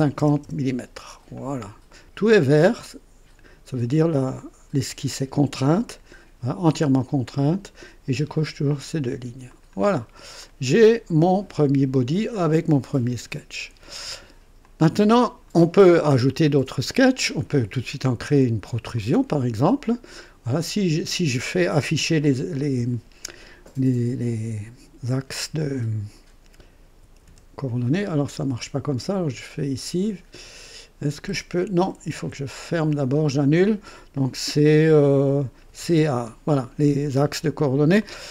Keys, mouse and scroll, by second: 0.2 KP_0, 0.4 KP_Enter, 0.4 Return, 9.5 click, 10.4 click, 14.6-15.6 drag, 18.9 click, 26.7-27.9 typing, 28.8 click, 31.7 Escape, 32.9 click, 35.4-36.3 typing, 38.0-38.3 drag.